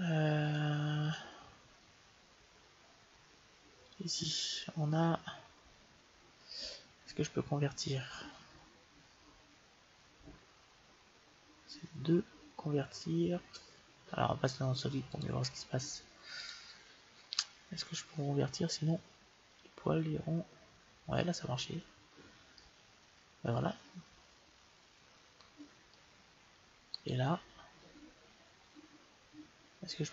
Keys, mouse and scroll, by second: 0.3-2.7 drag, 3.7-5.5 drag, 14.9-16.8 drag, 19.4-21.1 drag, 22.4-24.3 middle drag, 26.9-28.6 right drag.